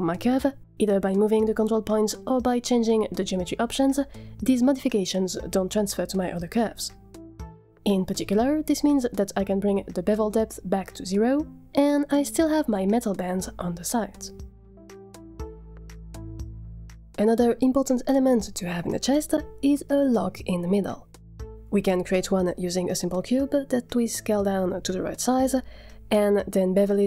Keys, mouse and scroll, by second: 1.0 Tab, 1.8 g, 7.5 Tab, 8.1-8.5 drag, 8.7-9.2 scroll down 8, 9.5 ctrl+z, 9.5 shift+click, 10.6-11.8 shift+drag, 12.2-12.7 scroll down 2, 12.7-16.2 middle drag, 16.7-18.2 scroll up 2, 19.4 middle click, 20.0 shift+middle click, 22.3 scroll up 1, 22.3 middle click, 22.6 shift+a, 23.1 scroll down 3, 23.1 middle click, 23.2 g, 23.4 g, 23.7 Tab, 23.7 s, 24.0 Tab, 24.3 click, 24.9 click, 25.9 click, 26.0 scroll up 4, 26.2 g, 26.5 Tab, 27.0 click.